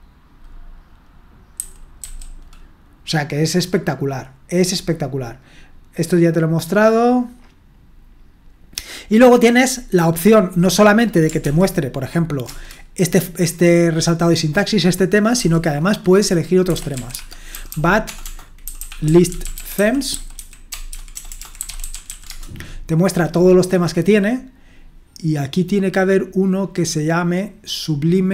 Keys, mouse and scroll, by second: 1.6-2.0 typing, 11.4 ctrl+p, 12.5 Return, 15.4 typing, 16.4-22.6 typing.